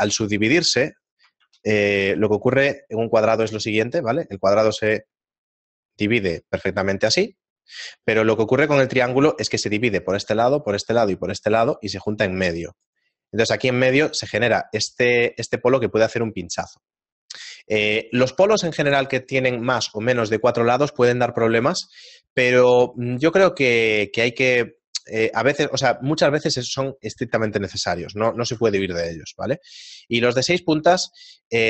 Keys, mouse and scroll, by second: 28.9 middle click, 30.5 right click, 30.5-31.5 scroll down 2, 31.5 shift+middle click.